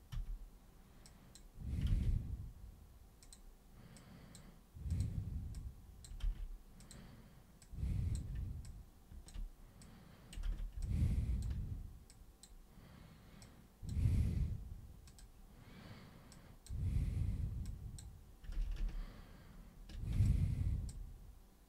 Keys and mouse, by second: 0.1 super+w, 1.0 super+click, 3.2 super+click, 3.9 super+click, 4.9 super+click, 5.5 super+click, 6.2 ctrl+super+z, 6.7 super+click, 7.6-8.1 super+drag, 8.6-9.2 ctrl+super+drag, 9.8 super+click, 10.4 ctrl+super+z, 10.8-11.4 ctrl+super+drag, 12.0 super+click, 13.4 super+click, 15.0 super+click, 16.3 super+click, 17.6 super+click, 18.5 ctrl+super+z, 18.8 ctrl+super+z, 20.2 alt+super+click.